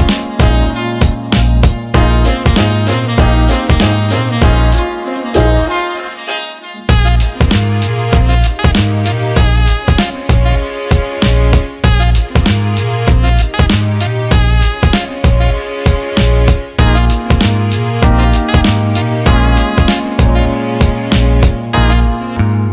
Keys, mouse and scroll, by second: 0.3 click, 0.7 click, 1.3 Tab, 2.8 click, 3.5 click, 7.0 click, 7.6 click, 8.9 click, 9.2 alt+middle click, 9.4 alt+shift+middle click, 11.6-14.7 drag, 22.3-22.7 drag.